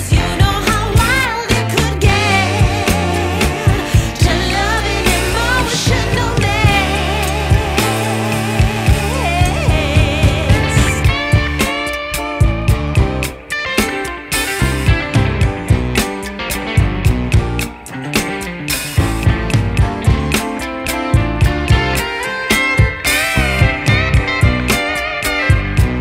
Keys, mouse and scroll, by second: 1.0 ctrl+shift+b, 9.9 ctrl+shift+b, 13.0 scroll up 1, 13.1 scroll down 1, 13.5 scroll up 1, 13.6-14.0 scroll down 3, 14.0 scroll up 1, 14.8 scroll down 1, 15.1 scroll up 1, 15.4-15.7 scroll down 2, 15.7 scroll up 1, 15.9 scroll down 1, 16.0-16.4 scroll up 2, 16.4-16.8 scroll down 2, 16.8 scroll up 2, 16.9 scroll down 1, 16.9-17.7 scroll up 4, 17.7-18.9 scroll down 1, 18.9 scroll up 1, 19.6 scroll down 1, 20.6 click, 22.1 click, 23.0 click, 24.5 click.